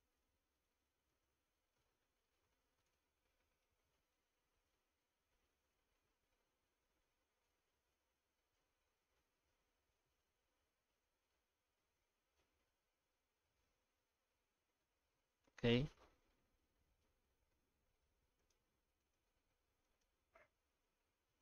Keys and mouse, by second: 2.2 middle click, 3.6 F9, 11.3-14.1 middle drag, 14.8-15.5 middle drag, 15.7 shift+middle drag, 16.3-17.1 middle drag, 17.7 middle drag, 18.4 right click, 19.0-20.1 right drag.